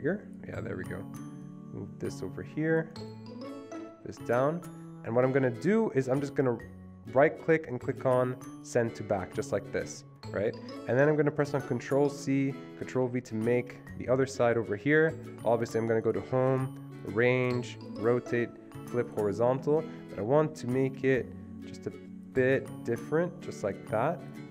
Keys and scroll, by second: 12.1 ctrl+c, 13.0 ctrl+v.